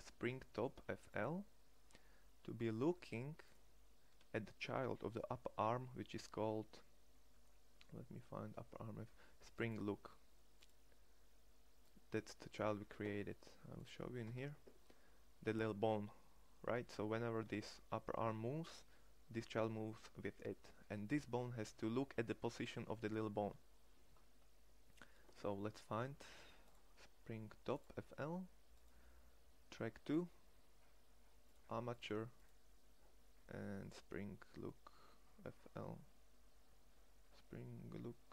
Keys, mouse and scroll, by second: 14.4 Tab, 17.5 Tab.